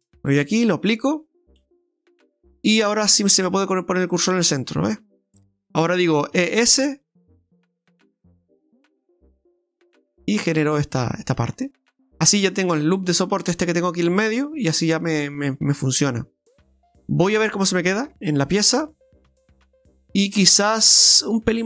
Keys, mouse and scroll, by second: 0.5 click, 1.4 Tab, 1.9 middle click, 3.3 shift+s, 5.3 middle click, 6.4 e, 11.7 middle click, 15.4 middle click, 18.0 KP_Divide, 19.3 middle click, 21.3 middle click, 21.4 s.